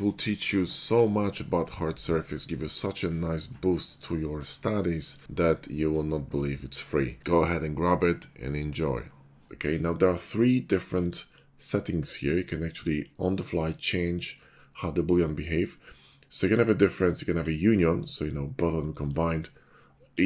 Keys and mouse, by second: 1.4 ctrl+shift+b, 2.0 Tab, 3.7 shift+middle click, 5.6 Tab, 5.6 `, 5.9 ctrl+shift+b, 6.2 Tab, 7.8 ctrl+KP_Subtract, 8.1 ctrl+Tab, 9.3 click, 9.4-11.0 shift+middle drag, 11.1 middle click, 12.4 middle click, 17.5-20.0 middle drag.